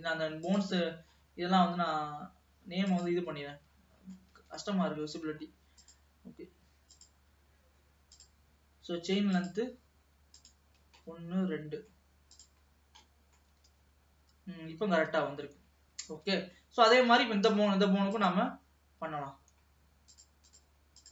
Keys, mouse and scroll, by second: 0.5 click, 1.2-2.9 scroll down 3, 2.9 click, 3.4-4.6 middle drag, 4.6 ctrl+s, 4.9-5.9 shift+middle drag, 5.9 click, 7.0 click, 8.2 click, 9.4-11.1 drag, 11.1-12.4 middle drag, 12.4 click, 12.8-13.1 scroll down 2, 13.1 middle click, 13.6 g, 15.7-16.3 scroll up 2, 16.3 ctrl+s, 16.7-17.8 middle drag, 17.8-18.2 scroll up 1, 18.2 click, 18.7 scroll down 1, 20.2-21.1 drag.